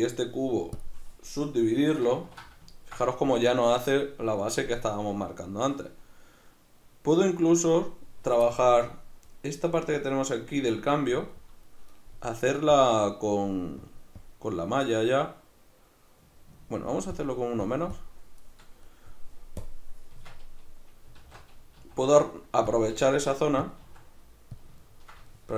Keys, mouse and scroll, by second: 2.2 ctrl+2, 12.7-18.9 drag, 18.9 middle click, 19.6-22.8 drag, 20.1 Tab, 21.2 alt+q, 21.8 s, 22.9 g, 23.7 click, 23.8 s, 24.6 click, 24.8-25.5 ctrl+middle drag.